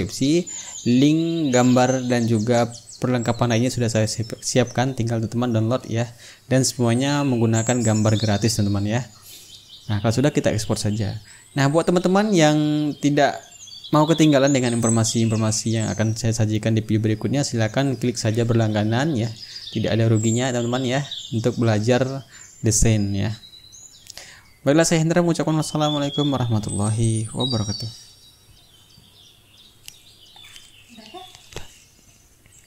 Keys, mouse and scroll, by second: 3.5 click, 4.7 click, 6.1 click, 7.0 click, 8.6 click.